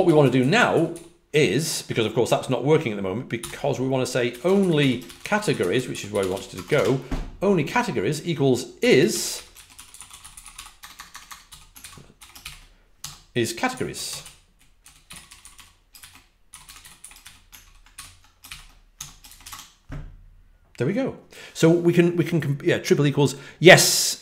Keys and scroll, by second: 0.0-0.5 typing, 3.3-7.1 typing, 8.5-11.4 typing, 13.4-15.5 typing, 16.5-17.4 typing, 17.9 ctrl+n, 19.4 Return, 19.4 w.